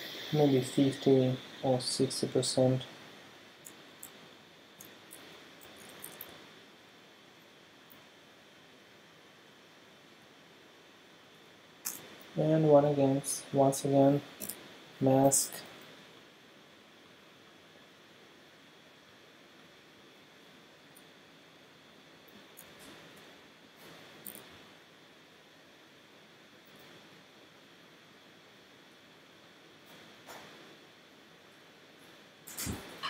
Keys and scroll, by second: 4.5 alt+super+space, 5.7 super+t, 6.3 ctrl+super+t, 11.9 Return, 14.4 e, 15.3 ], 22.3 v, 22.7 super+space, 24.3 e, 26.7 [, 28.5 [.